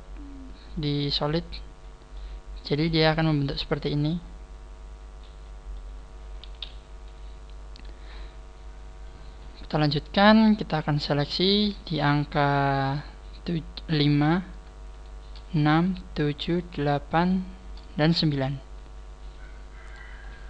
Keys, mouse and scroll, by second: 0.9 click, 0.9 click, 1.6-2.1 scroll up 2, 2.1 middle click, 2.9-3.5 scroll down 4, 3.3 middle click, 6.6 KP_1, 10.5 scroll up 4, 11.2-11.7 scroll up 1, 11.8 right click, 14.0 scroll up 2, 14.9 shift+right click, 17.2 shift+right click, 18.2 scroll down 4, 19.9 scroll down 1.